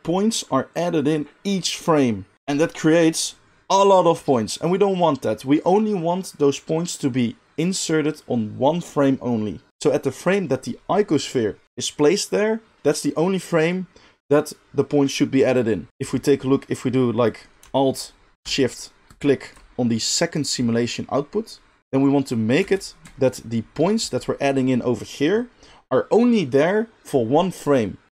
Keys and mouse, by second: 15.9-19.1 middle drag, 15.9 g, 19.1 alt+shift+click, 19.3-21.8 alt+shift+middle drag, 21.8-28.1 drag, 21.8 space, 22.7 space.